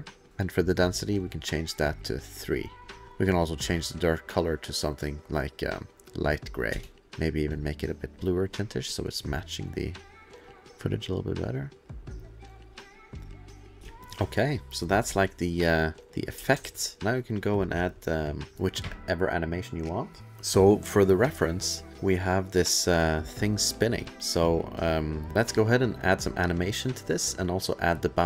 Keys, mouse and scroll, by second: 0.3 click, 2.1 click, 2.9 space, 3.4 click, 4.3 click, 5.9 click, 6.7 space, 7.0 click, 7.0-7.5 scroll, 7.5 click, 8.1 click, 8.7 click, 10.6 click, 13.8 ctrl+s, 13.8 space, 14.0 click, 15.1 space, 16.0 click, 16.4 space, 16.6 ctrl+s, 17.0 click, 21.9 click, 22.3 click, 23.5 click, 24.9 click, 25.3 click, 25.3-25.7 scroll, 26.7 click.